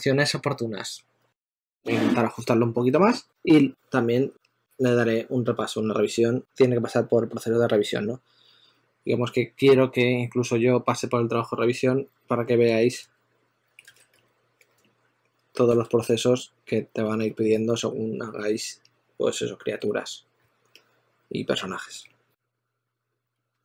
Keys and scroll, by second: 12.4 2, 13.7 super+z, 13.9 s, 14.4 2, 15.5 super+z, 21.8 s, 23.2-23.6 typing.